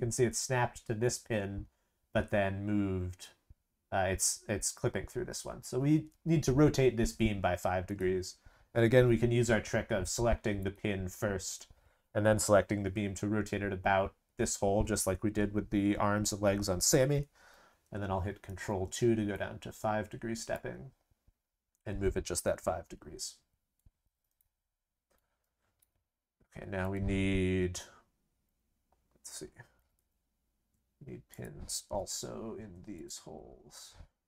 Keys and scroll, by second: 18.4 ctrl+2, 29.7 ctrl+c, 29.9 ctrl+v, 31.9 ctrl+v.